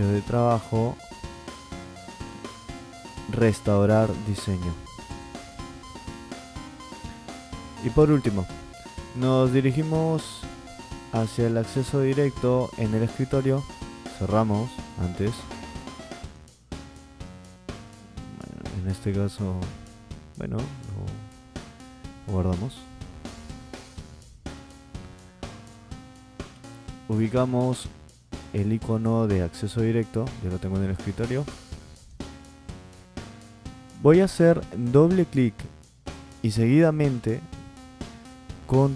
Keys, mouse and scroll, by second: 4.9 click, 15.9 click, 23.2 click, 31.9 click.